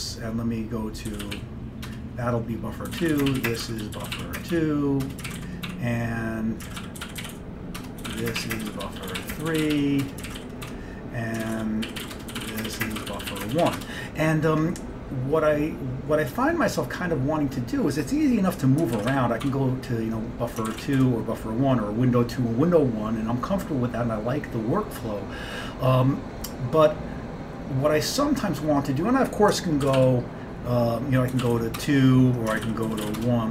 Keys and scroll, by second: 0.0-14.3 typing, 1.9 Return, 20.7-21.5 typing, 29.9 ctrl+x, 30.0 b, 31.2-33.5 typing.